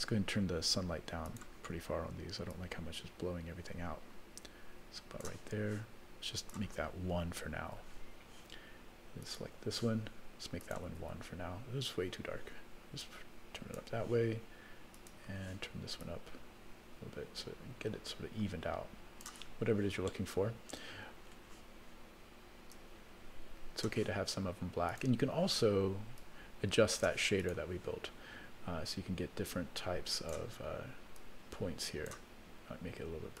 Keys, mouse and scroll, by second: 1.3 click, 2.5-5.3 drag, 6.4-7.8 drag, 9.2 click, 10.6 click, 11.8-13.9 drag, 14.9 click, 16.0-19.3 drag, 20.1-21.4 middle drag, 22.7-23.9 drag, 24.9 click, 26.2 click, 27.4 click, 29.4 click, 31.1-32.2 drag.